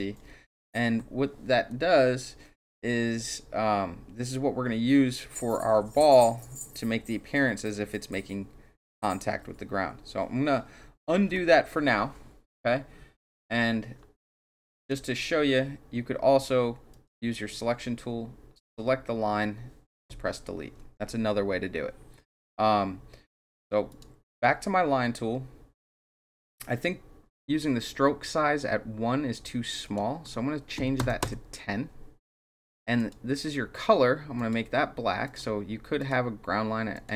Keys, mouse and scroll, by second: 11.1 ctrl+z, 14.4 click, 16.9 click, 18.5 click, 23.9 click, 29.8 click, 31.2 KP_Enter, 33.0 click, 34.4 click, 35.3 click, 36.0 click, 36.9 click.